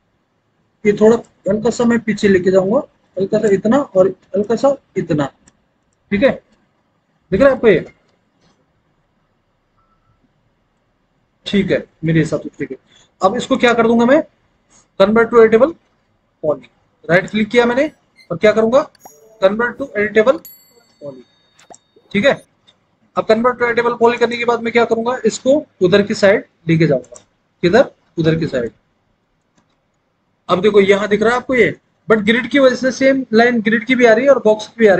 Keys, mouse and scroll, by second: 7.5 alt+w, 7.9 alt+w, 28.9 alt+w, 29.6 alt+w.